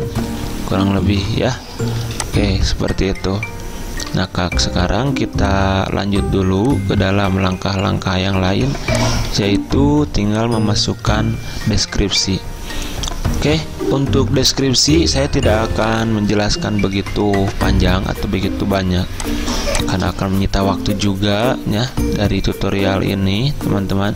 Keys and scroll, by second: 8.5 v, 9.3 z, 20.6 l.